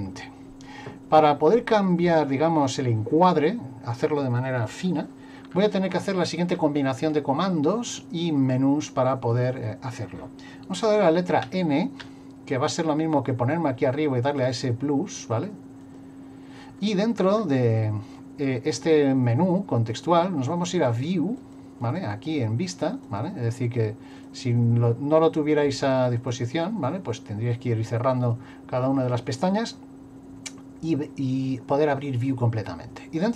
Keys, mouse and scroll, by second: 11.4 n, 14.3 click, 15.2 n, 15.8 click, 20.7 click, 21.4 click, 21.8 click, 23.1 click, 24.1 click, 26.2 click.